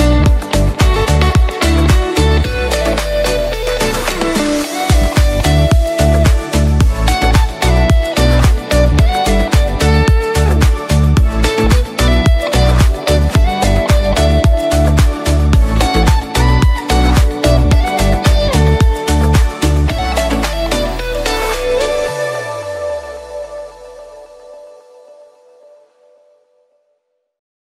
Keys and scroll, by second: 8.3 p.